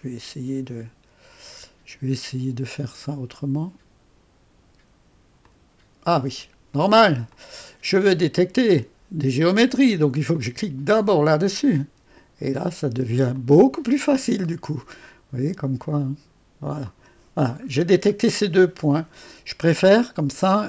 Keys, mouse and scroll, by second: 0.0-3.4 drag, 5.4 click, 7.3 click, 10.4 click, 11.1 click, 13.4-14.7 drag, 14.0 middle click, 14.0 right click, 16.9 click.